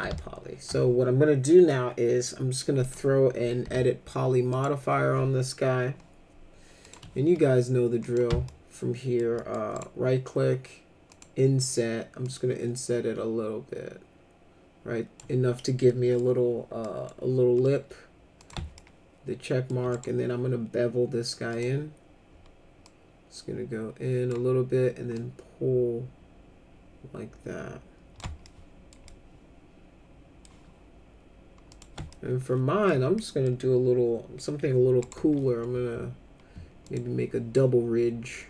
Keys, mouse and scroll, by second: 0.1 alt+middle click, 2.8 click, 3.6 e, 4.5 click, 6.8 click, 8.0 click, 8.4 alt+middle click, 9.4 middle click, 9.8 right click, 11.1 click, 12.2-15.2 drag, 15.9 middle click, 16.8 middle click, 18.4 click, 18.8 alt+middle click, 19.9 right click, 21.5 click, 22.8-24.3 drag, 25.1-28.2 drag, 28.5 alt+middle click, 29.1-30.4 alt+middle drag, 31.7 click, 32.1 alt+middle click, 33.1 middle click, 35.0 right click, 36.8 click.